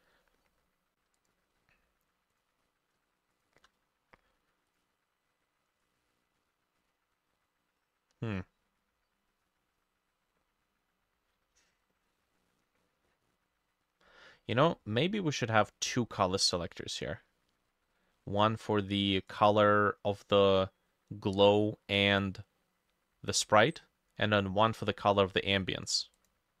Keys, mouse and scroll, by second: 1.5-2.6 scroll down 3, 2.6-3.0 scroll down 4, 3.4 shift+click.